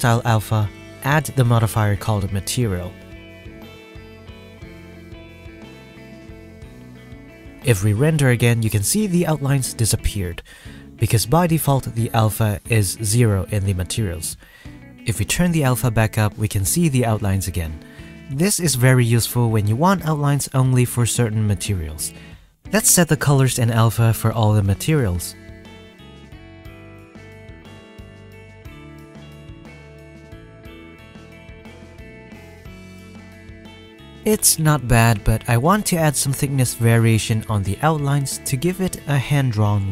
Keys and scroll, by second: 8.5 F12, 30.5 ctrl+c, 31.0 ctrl+v, 34.1 F12.